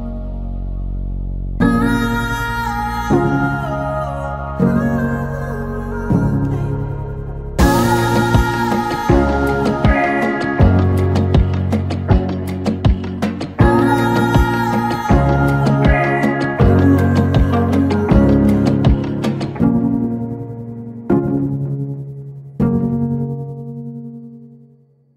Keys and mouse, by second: 0.1-1.1 drag, 1.7 click, 2.8 click, 3.8-5.2 drag, 8.0-9.6 drag, 11.1 click, 12.0 click, 15.6 click, 21.2 click, 24.5-25.1 drag.